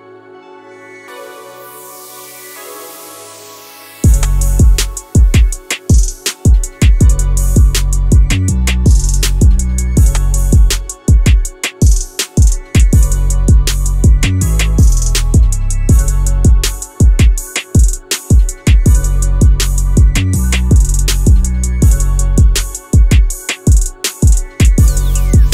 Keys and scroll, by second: 0.4 1, 1.4 Return, 13.5 4, 13.6 Return, 19.1 Escape.